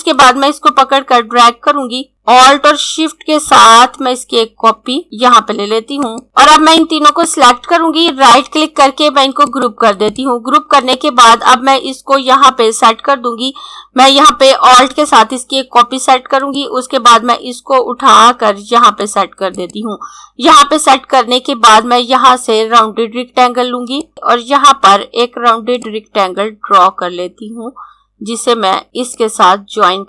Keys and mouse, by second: 0.3 click, 5.0 click, 5.4 z, 6.1 click, 8.1 right click, 9.3 click, 16.2 click, 23.5 click, 25.8 click.